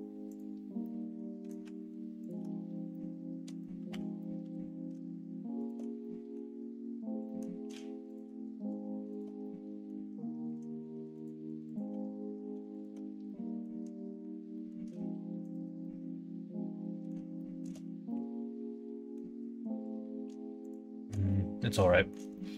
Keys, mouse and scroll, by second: 0.8 middle click, 2.2 alt+click, 2.8 middle click, 3.8 2, 4.1 middle click, 5.6 alt+shift+click, 5.9 middle click, 7.2 middle click, 8.1 alt+shift+click, 9.4 middle click, 11.1 shift+click, 12.7 alt+shift+click, 13.2 middle click, 14.5 middle click, 15.3 alt+shift+click, 15.7-17.0 middle drag, 17.3 shift+middle click, 18.0-19.1 middle drag, 20.5 shift+click, 21.2 middle click, 22.3 shift+middle click.